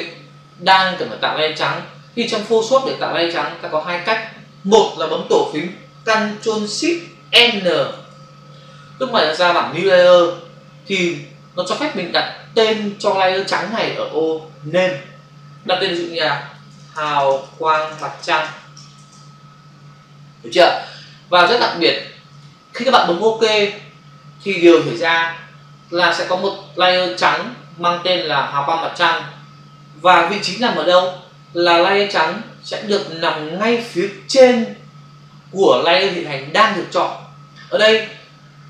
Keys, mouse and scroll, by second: 3.6 click, 7.8 ctrl+shift+n, 16.5-18.8 typing, 19.9-20.6 typing.